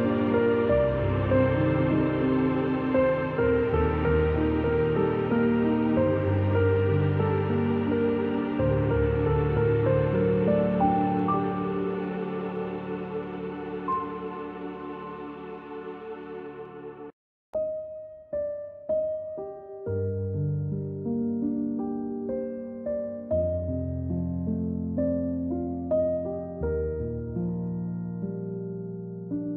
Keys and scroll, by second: 0.7-2.1 typing, 3.2-3.8 typing, 4.9 space, 5.1 space, 5.7 v, 6.3 a, 7.7 v, 9.8-11.4 typing, 16.4-17.3 typing, 18.4 z, 19.3 c, 22.7-24.0 typing, 25.6 v, 26.0 a.